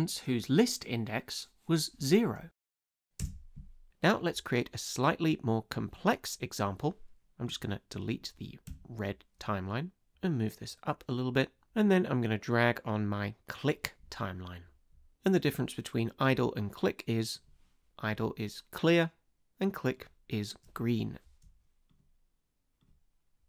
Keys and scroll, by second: 3.2 space, 8.7 BackSpace.